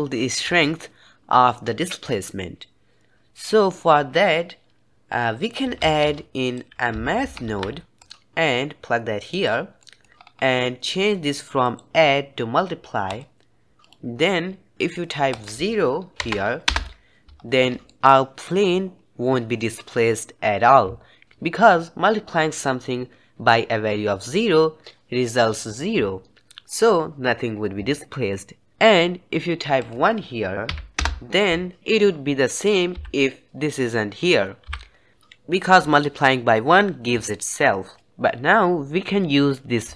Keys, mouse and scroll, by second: 5.7 shift+a, 9.7 middle click, 10.1-11.5 scroll up 3, 11.5-13.8 drag, 15.2-17.3 drag, 17.3-17.8 scroll down 1, 17.8-18.7 shift+middle drag, 18.7-21.2 scroll up 1, 29.7-31.8 drag, 32.6 click, 32.9 m, 34.6 m, 39.9 shift+click.